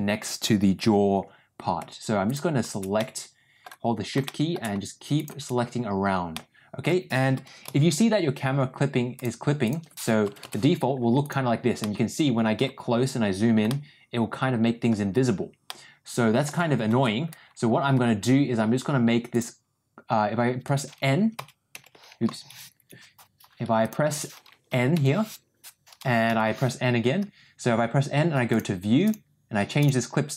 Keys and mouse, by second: 2.9 middle click, 4.1 shift+middle click, 5.1 shift+click, 6.2 middle click, 7.6 n, 9.1-10.8 drag, 11.2 click, 11.7 middle click, 13.6-14.8 middle drag, 15.6 middle click, 19.4-23.4 ctrl+drag, 22.7 Escape, 24.9 n, 26.2 n, 29.0 click, 29.7-30.3 drag.